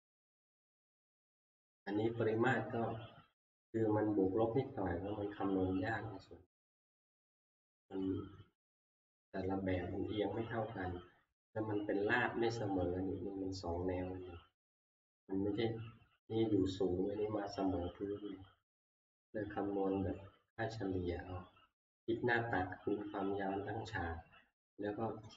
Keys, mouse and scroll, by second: 1.0-1.5 scroll, 3.3 scroll, 3.6 middle click, 3.6 scroll down 1, 8.0 click, 9.7 scroll up 4, 11.5 middle click, 11.5 scroll down 4, 14.3 middle click, 14.3-15.3 scroll up 7, 16.6-18.3 scroll, 18.3-19.9 scroll, 19.9 middle click, 21.1 middle click, 21.1 scroll, 21.2 middle click, 24.2-25.3 scroll down 1.